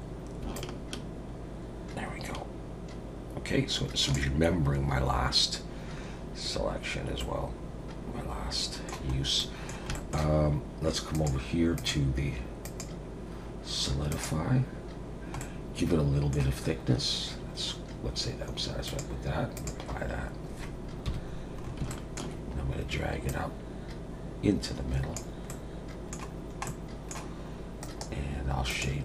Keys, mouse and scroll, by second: 0.5 shift+click, 7.2 middle click, 9.1-9.8 scroll up 3, 9.4 middle click, 9.9 shift+middle click, 11.1 click, 11.8 click, 12.6 click, 15.4 middle click, 18.9 click, 20.3 scroll down 1, 21.1 KP_1, 21.6 scroll up 3, 22.3 shift+middle click, 23.3 click, 25.5 middle click, 26.3 scroll down 2, 26.7 middle click, 27.8 right click.